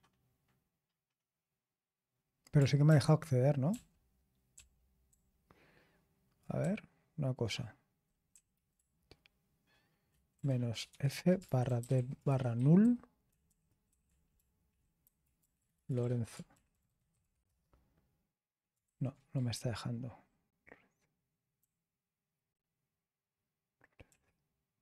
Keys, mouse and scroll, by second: 2.8 ctrl+p, 3.7 ctrl+p, 4.5 ctrl+p, 5.0 ctrl+p, 6.6 Left, 7.2 Left, 7.3-7.8 Left, 7.9 Left, 7.9 Left, 8.3 Right, 8.7 BackSpace, 9.4 BackSpace, 9.4-11.4 BackSpace, 11.7 f, 12.8-17.4 typing, 16.3 Left, 16.5 Left, 18.5-19.8 typing, 19.9 Return, 23.8-24.5 typing.